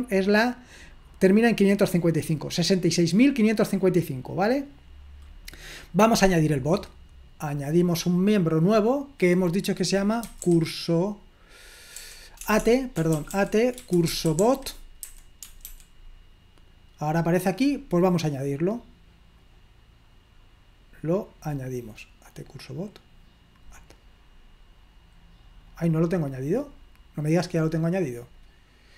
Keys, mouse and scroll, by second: 0.0-1.9 drag, 2.6 click, 3.6 click, 6.1 click, 7.9 click, 10.0-10.9 typing, 12.0-16.2 typing, 18.3 click, 19.5 click, 22.9 click, 23.9 click, 25.7 click, 27.6 click, 28.4 click.